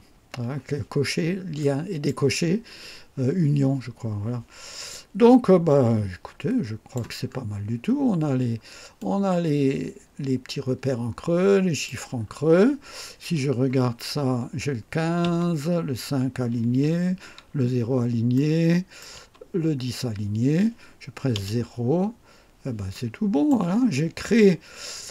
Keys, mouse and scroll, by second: 0.3 scroll down 2, 1.5-2.2 drag, 4.3 scroll down 2, 4.8-7.1 drag, 7.2 scroll up 1, 8.9-12.0 drag, 12.1-12.8 scroll down 2, 13.8 1, 15.2 KP_4, 18.3-19.2 right drag, 19.1 KP_6, 21.3 KP_0, 21.8-22.3 scroll down 1, 22.9-23.6 right drag, 23.8-24.5 scroll up 4, 24.9 scroll down 2.